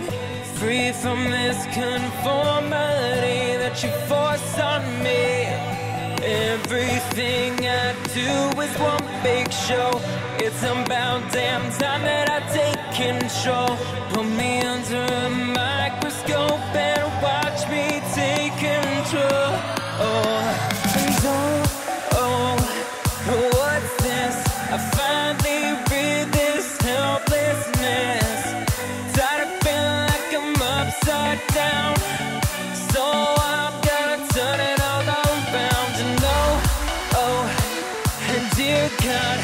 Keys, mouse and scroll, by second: 0.9-9.2 drag, 9.2 z, 10.0 click, 10.9 KP_1, 11.7-13.5 scroll up 1, 13.5-14.4 scroll up 1, 14.4-15.5 scroll up 1, 15.5-16.0 scroll up 1, 16.0-17.0 scroll up 1, 17.0-19.0 drag, 19.0-20.3 middle drag, 20.3 click, 21.8-23.5 middle drag, 23.5 Tab, 24.8 a, 26.6 ctrl+b, 31.1 Tab, 31.6 click, 32.0-34.2 middle drag, 34.2 click, 36.0 Tab, 37.5 a, 38.4 ctrl+b.